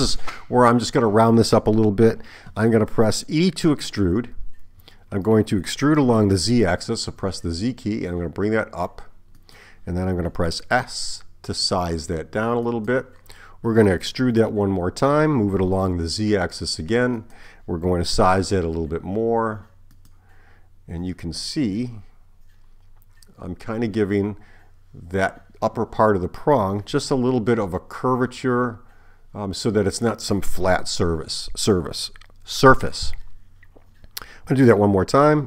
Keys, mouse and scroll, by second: 4.7 e, 10.7 s, 14.4 e, 18.1 s.